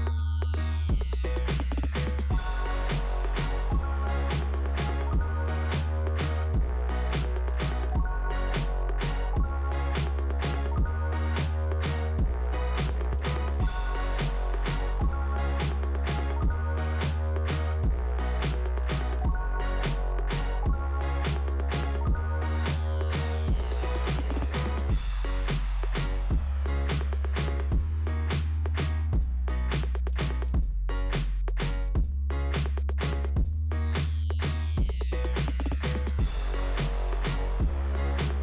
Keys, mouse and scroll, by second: 1.3 scroll down 1, 6.9 click, 7.8 click, 9.4 scroll up 2, 10.7 scroll down 2, 12.1 click, 14.2 click, 20.9 click, 22.6 click, 25.3 click, 29.6 click, 29.8 click, 31.6 click, 33.8 click, 35.0 click, 36.8-37.6 scroll down 2, 37.6 click.